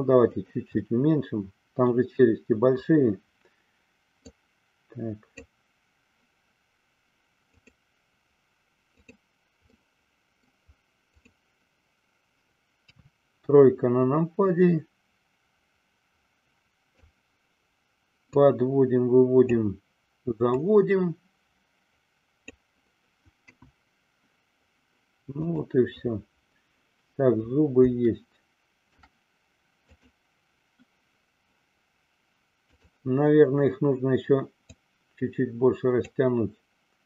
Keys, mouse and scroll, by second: 1.0-2.2 middle drag, 4.2 click, 7.6 click, 9.0 click, 9.9-10.7 middle drag, 11.2 click, 12.8 KP_3, 14.5-17.2 drag, 18.3-19.7 drag, 20.6-22.7 drag, 23.6 KP_1, 25.7 click, 28.3-29.1 shift+middle drag, 29.8 click, 32.7 click, 34.7-36.3 drag.